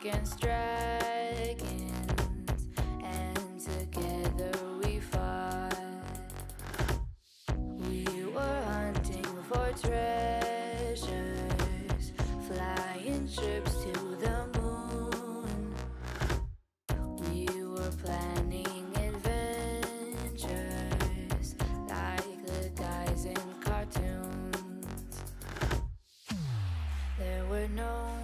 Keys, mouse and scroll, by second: 0.2 KP_1, 0.5 click, 0.7 shift+middle click, 1.0 scroll up 1, 1.2 shift+a, 3.2 Tab, 3.7 s, 5.2 s, 6.4 s, 7.2 alt+z, 7.4-7.8 scroll up 1, 7.8 g, 10.1 shift+middle click, 10.7-11.4 scroll up 3, 11.4 g, 12.7 s, 13.6 scroll down 1, 13.7-14.7 middle drag, 14.7 KP_3, 15.0 g, 15.9 drag, 16.1 alt+z, 16.2-17.4 middle drag, 17.4 click, 17.7 Tab, 18.3-19.7 drag, 21.3 click, 21.6 click, 21.8-22.4 middle drag, 22.4 KP_1, 23.5 shift+middle click, 23.6 scroll up 3, 23.8 Tab, 24.1 a, 24.4 s, 26.0 click, 27.2 s.